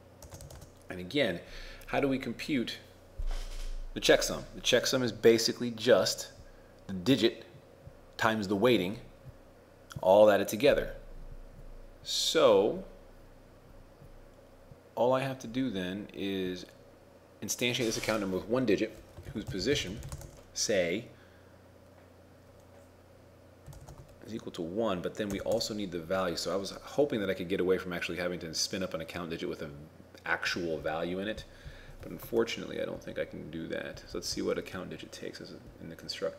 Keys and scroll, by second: 0.6 shift+space, 19.4 shift+p, 32.2 ctrl+Tab, 32.4 shift+a, 32.4 shift+space, 33.0 ctrl+Left, 34.0 ctrl+Right, 34.2 ctrl+Down, 34.4 ctrl+Down.